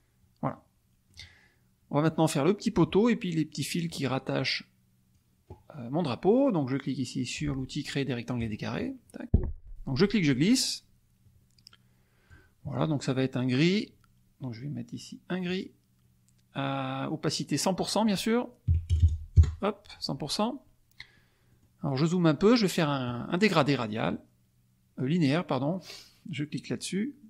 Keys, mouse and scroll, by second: 0.5 middle click, 4.3 click, 8.3 click, 8.8 middle click, 10.0-12.4 drag, 15.4 click, 17.8 click, 18.6 KP_1, 18.9 KP_0, 19.3 KP_Enter, 21.5 middle click, 22.0 middle click.